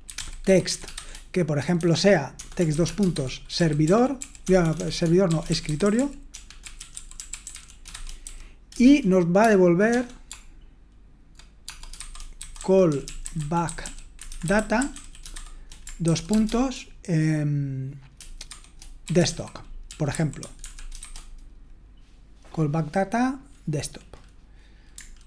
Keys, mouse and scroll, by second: 0.0-16.8 typing, 19.3-21.5 typing.